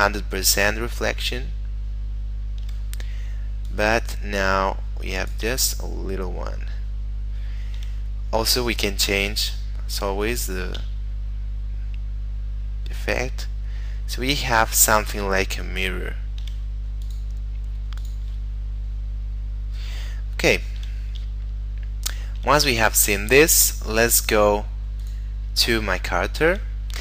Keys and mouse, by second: 3.7 click, 5.7 shift+middle click, 8.6 middle click, 9.4 click, 11.0 shift+middle click, 17.1 click, 18.6 shift+middle click, 21.5 shift+middle click, 22.9 shift+middle click, 23.4 shift+middle click, 24.3 click, 26.0 shift+middle click.